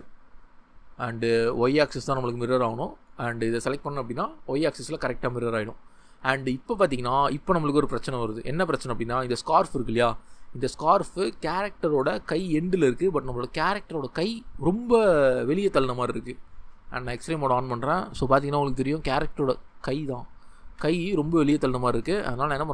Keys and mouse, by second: 8.4 ctrl+middle click, 8.5 ctrl+middle click, 18.6 g, 19.5 ctrl+z, 20.6 g.